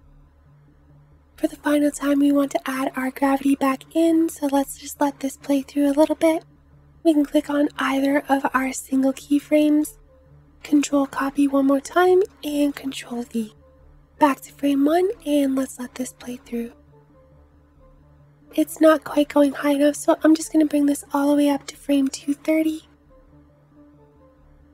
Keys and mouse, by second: 1.1 space, 2.9 space, 10.9 ctrl+c, 11.8 ctrl+v, 14.0 space, 18.9 space, 20.2 click, 22.9 space.